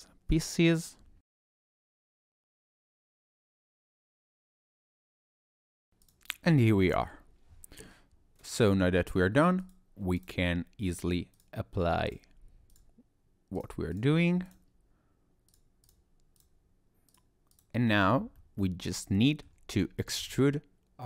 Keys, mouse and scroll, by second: 1.9 click, 2.0 click, 2.5 click, 2.8 click, 3.4 click, 3.6 click, 4.1 click, 4.2 click, 4.4 click, 4.5 click, 5.2 click, 5.3 click, 5.4 click, 6.0 click, 6.5 shift+middle click, 7.0-7.6 scroll down 2, 9.1 click, 9.6 click, 10.2 click, 11.4 click, 12.7 click, 13.6 click, 14.5 click, 15.5 click, 16.4 click, 17.1 click, 18.4 middle click, 18.9 click, 19.2 middle click, 20.3 scroll up 1, 20.3 middle click.